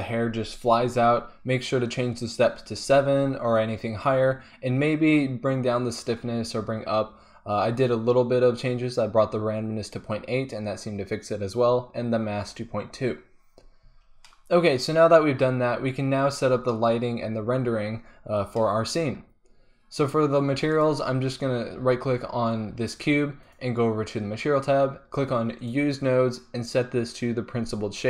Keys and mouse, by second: 14.1-14.4 drag, 14.5 click, 14.7 click, 14.9 click, 15.1 click, 20.5 middle click, 23.1 middle click, 23.4-28.0 drag.